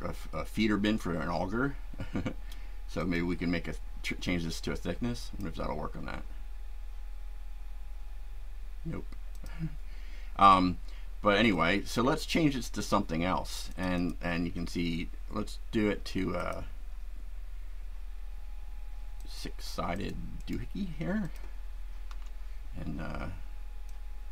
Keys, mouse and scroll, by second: 3.0 click, 5.2 click, 9.4 click, 11.5-12.4 shift+right drag, 13.7 click, 16.4 click, 19.2-19.7 drag, 19.9 click, 20.4 right click, 21.2 click, 22.1 Delete, 23.9-24.3 drag.